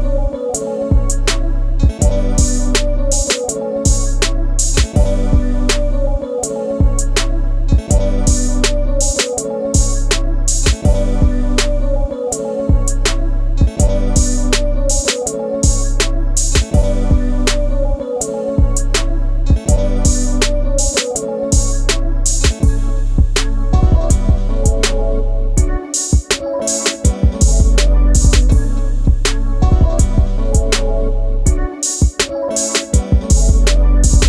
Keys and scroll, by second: 29.1 ctrl+z.